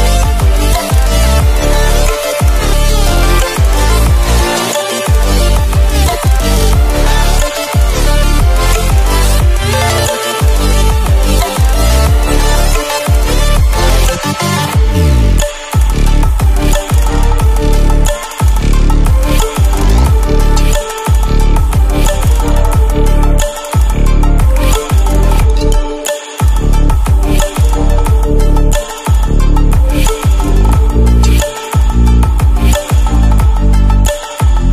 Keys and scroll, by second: 2.3 Escape, 7.0 alt+a, 9.8 alt+a, 11.0 alt+7, 12.1 alt+a, 13.0 Escape, 19.5 Return.